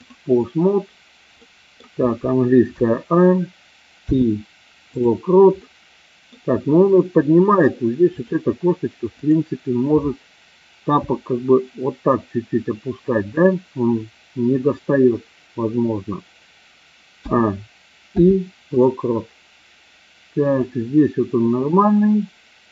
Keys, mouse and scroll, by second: 1.3-1.7 middle drag, 2.6 a, 4.0 i, 5.6-6.4 middle drag, 8.1 click, 9.1 click, 11.0 r, 17.1 a, 18.1 i, 20.6-22.7 drag.